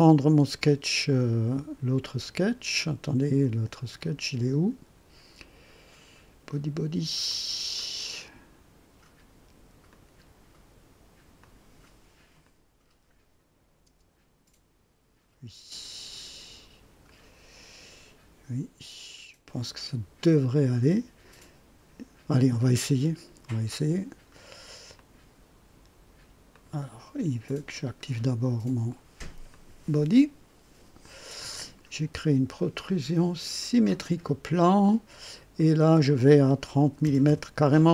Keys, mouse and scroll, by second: 4.0 click, 7.2 click, 7.7 click, 9.9 click, 11.4 click, 12.4 click, 13.8 space, 16.3 space, 24.9 click, 26.5 click, 27.4 click, 29.5 click, 31.4 click, 33.6 click, 35.5 click, 37.0 KP_0, 37.2 KP_Enter.